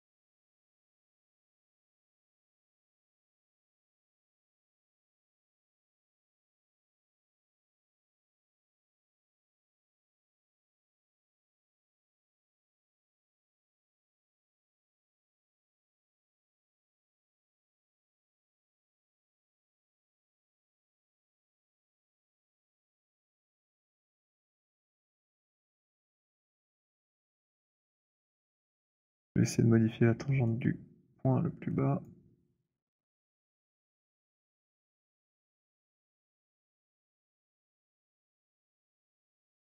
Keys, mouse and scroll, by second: 0.2 alt+right click, 1.7 alt+right click, 6.1 alt+click, 7.4 alt+middle click, 11.5 click, 15.8 click, 16.4 alt+middle click, 17.7 click, 17.9 alt+middle click, 17.9 alt+click, 27.1 click, 28.5 alt+middle click, 28.8 alt+right click, 30.3 right click, 32.0 click, 33.9 click, 35.6 click, 38.6 click.